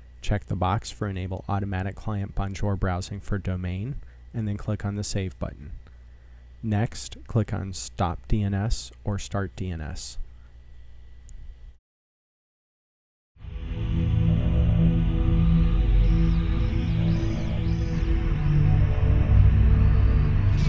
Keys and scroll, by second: 3.9-6.8 typing.